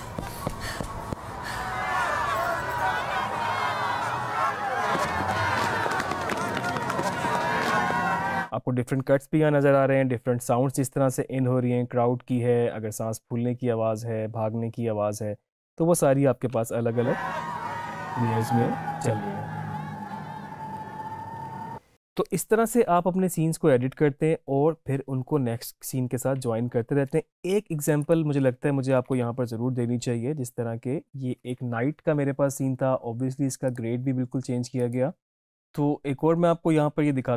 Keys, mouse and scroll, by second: 8.3 space, 16.6 space, 21.6 space, 28.1 click, 33.8 click.